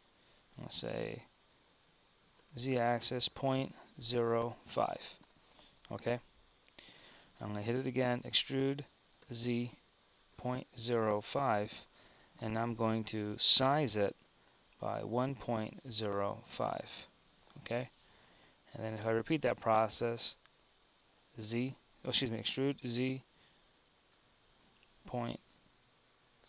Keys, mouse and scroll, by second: 8.3 e, 13.4 s, 21.4 e.